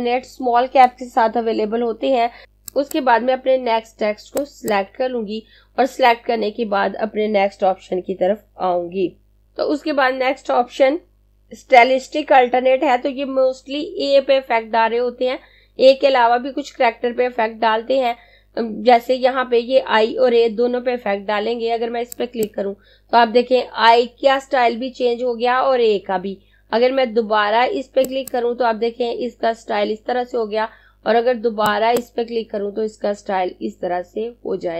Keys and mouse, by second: 3.0 click, 21.8 click, 27.6 click, 31.0 click.